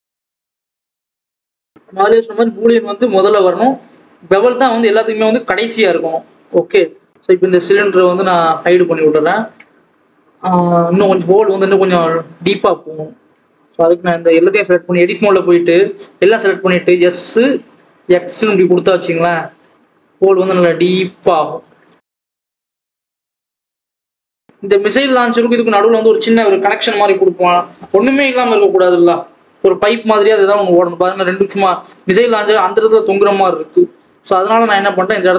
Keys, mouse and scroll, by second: 0.0-2.5 drag, 4.6 click, 6.4 click, 8.5 click, 10.0-10.3 scroll up 3, 10.3-12.4 scroll down 1, 12.4 click, 13.5 click, 13.7 Tab, 14.3 a, 14.7 s, 19.3 Tab, 20.3 click, 21.9 click, 23.3 click, 24.0 click, 24.4-24.8 scroll up 5, 25.0-29.4 scroll down 1, 29.9 KP_7, 30.6-31.4 scroll up 2, 31.4-31.8 scroll down 1, 31.8 Left, 32.1-32.4 scroll down 2, 32.4-32.9 scroll up 3, 32.9-33.5 scroll down 3, 33.5 Left, 34.8 shift+s, 35.0 alt+a.